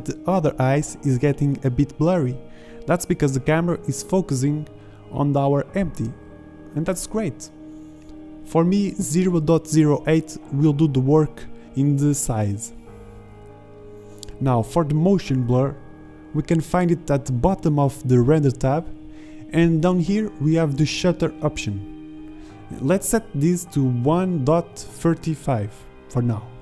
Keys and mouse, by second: 2.9 click, 6.7 click, 6.9 click, 8.0 z, 8.5 middle click, 8.8 drag, 9.1 ctrl+z, 9.5 g, 9.8 shift+z, 10.5 z, 11.8 shift+z, 16.2 shift+z, 16.8 z, 23.2 shift+z.